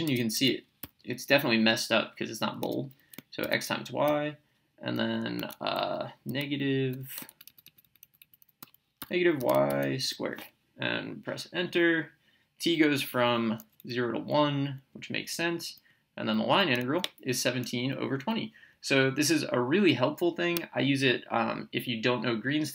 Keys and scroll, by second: 0.3 x, 0.8 y, 2.6 BackSpace, 3.4 *, 4.1 y, 5.3 Tab, 8.8-10.5 typing, 12.8 Return, 13.9 Down, 16.8 Right.